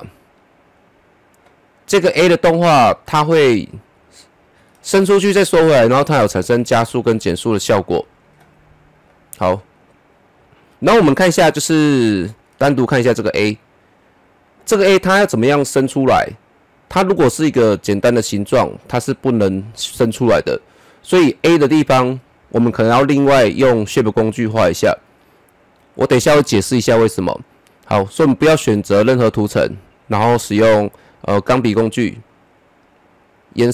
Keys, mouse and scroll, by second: 10.9-12.3 middle drag, 12.3-14.3 drag, 28.3 click, 31.0 click, 32.4 click, 32.6 click, 33.3 click.